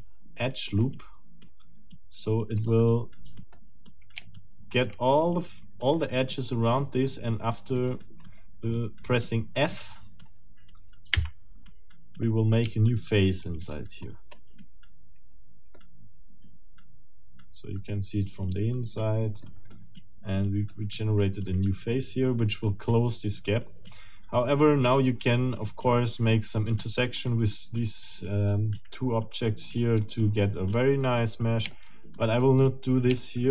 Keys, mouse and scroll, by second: 0.7 click, 1.8-2.2 scroll down 2, 2.8 middle click, 4.2 shift+middle click, 7.0 middle click, 11.2 f, 12.7 shift+middle click, 13.7-14.5 shift+scroll up 6, 15.3 scroll up 2, 15.7 middle click, 16.7-19.6 middle drag, 19.7-20.8 middle drag, 20.8 scroll up 2, 21.2 click, 21.6 click, 22.0 middle click, 25.1 middle click, 31.0 middle click, 31.7 shift+middle click, 33.2 shift+middle click.